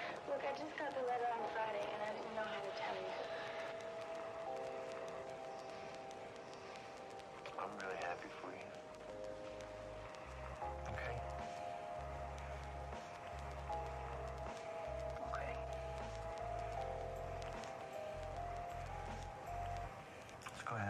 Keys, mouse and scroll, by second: 6.0 alt+middle click, 7.6 alt+middle click, 8.1 alt+scroll down 1, 8.8 alt+middle click, 9.5 scroll up 1, 10.7 scroll down 1, 11.0 alt+middle click, 11.3 alt+scroll up 1, 11.7 alt+middle click, 13.5 alt+middle click, 14.8 alt+click, 16.3 scroll up 1, 16.8 alt+click, 18.1 middle click, 18.8 scroll up 1, 19.4 alt+middle click, 19.5-20.0 alt+scroll up 2, 20.7 alt+middle click.